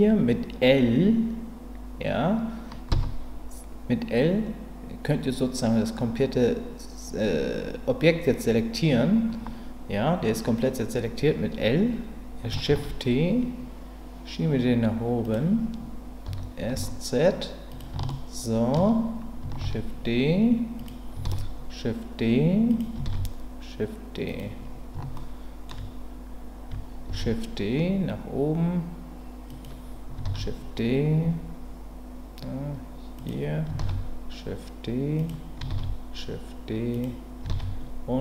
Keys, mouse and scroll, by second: 2.9 l, 12.7 shift+d, 15.2 click, 16.2 s, 16.7 z, 17.7 click, 18.1 shift+middle click, 19.6 shift+d, 20.8 click, 21.2 shift+d, 22.7 click, 24.3 click, 25.1 shift+middle click, 27.1 shift+d, 29.5 click, 30.2 shift+d, 33.2 click, 33.8 shift+d, 35.2 click, 36.9 click, 37.5 shift+d.